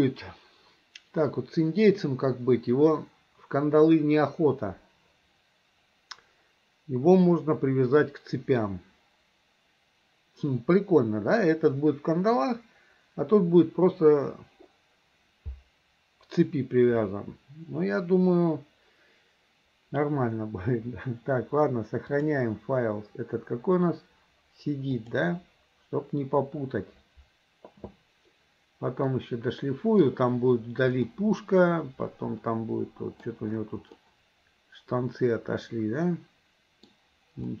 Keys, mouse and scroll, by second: 22.1-26.5 drag, 29.1 middle click, 31.1-33.3 middle drag, 34.0-36.9 middle drag.